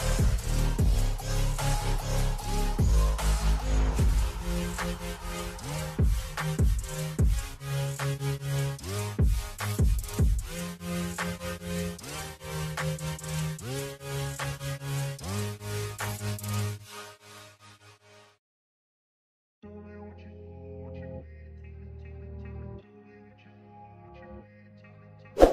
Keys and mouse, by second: 0.4 click, 2.4 click, 3.4 click, 5.2 click, 8.6 click, 10.9 click, 13.3 click, 14.6 click, 16.0 click, 17.4 click, 18.4 click, 19.8 click, 21.6 click, 22.6 Up, 23.0 Up, 23.1 Up, 23.9 Up, 24.1 Up, 24.4 Up, 24.6 Up, 24.8 Up.